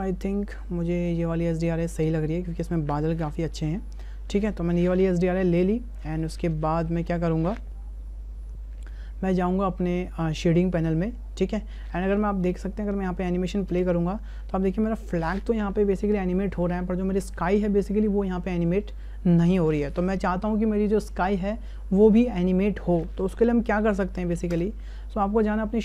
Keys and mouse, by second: 6.6 shift+click, 12.5 click, 13.5 click, 13.7 space, 24.5 space.